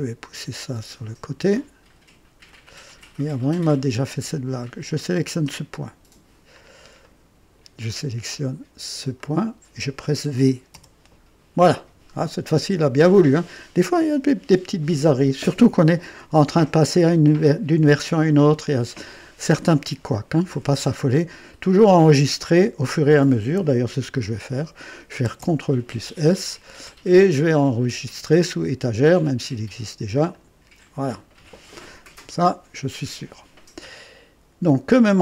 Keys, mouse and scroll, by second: 0.3-1.3 drag, 2.4-3.3 drag, 4.8 click, 6.6 scroll down 1, 7.0-7.7 right drag, 9.1 click, 10.7 v, 11.9-12.2 scroll down 1, 12.6-13.4 right drag, 25.2 ctrl+s, 27.0 click, 30.3 click, 35.0 scroll up 1.